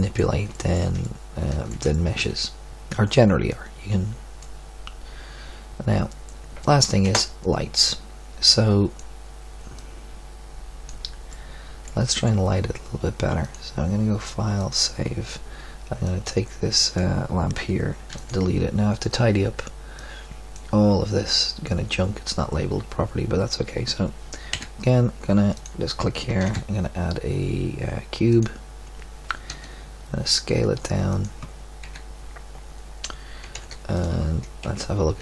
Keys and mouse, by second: 4.4 click, 5.2 click, 7.9 Escape, 9.0 click, 13.4 ctrl+q, 13.4-14.7 middle drag, 16.0 right click, 18.1 x, 24.5 KP_1, 25.5-27.7 middle drag, 26.3 shift+a, 29.5 s, 31.8 KP_3, 33.4 g, 34.6 KP_Decimal.